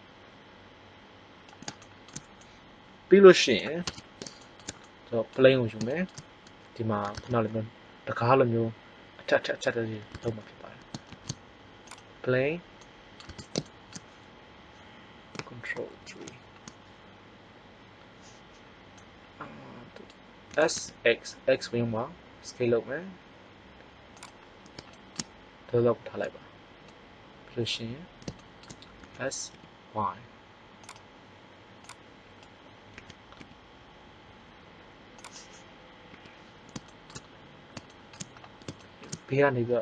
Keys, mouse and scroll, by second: 1.7 middle click, 3.8 Tab, 11.0 shift+a, 12.7 middle click, 13.2 Tab, 16.0 ctrl+KP_3, 19.0 middle click, 20.5 s, 24.3 click, 25.1 middle click, 29.0 s, 32.9 s, 36.1 KP_3, 37.0-38.0 middle drag, 39.6 r.